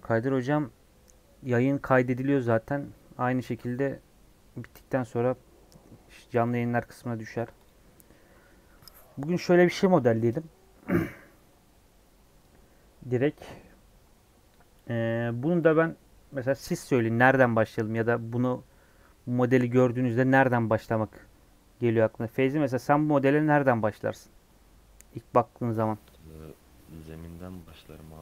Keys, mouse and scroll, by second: 7.6 click.